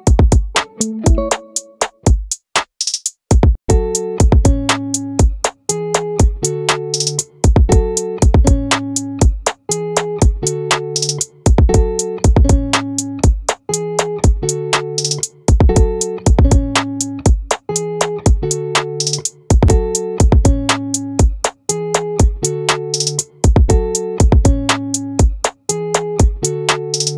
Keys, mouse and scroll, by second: 0.8-8.0 right drag, 8.0 middle click, 11.2-24.3 right drag, 24.3 middle click.